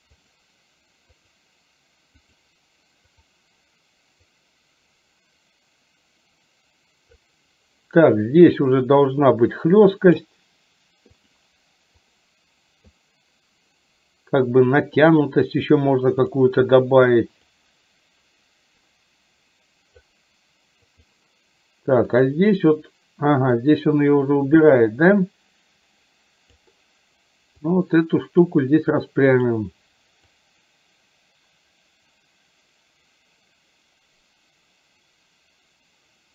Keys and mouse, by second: 1.2 click, 3.2 click, 4.3-7.2 drag, 9.3 click, 12.1 click, 17.6-20.1 drag, 20.9 click, 22.2 click, 23.7-26.7 drag, 27.9 click, 29.5 click, 30.5-36.3 drag.